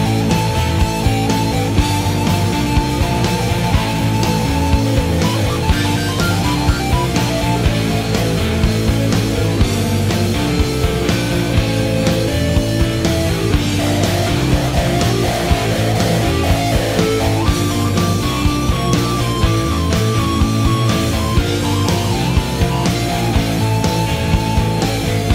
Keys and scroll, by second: 19.5-20.4 typing.